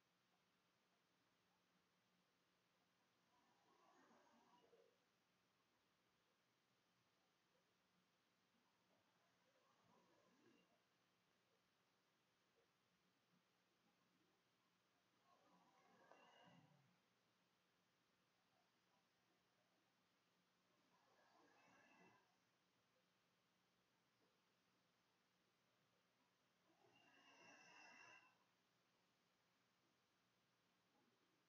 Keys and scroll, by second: 1.1-3.3 typing, 3.4 Tab, 5.0-8.3 typing, 9.5 shift+', 10.8-12.3 typing, 12.7 Left, 12.8 Down, 13.3 Right, 15.2 space, 29.5 ctrl+space, 30.1 ctrl+c, 31.0 r.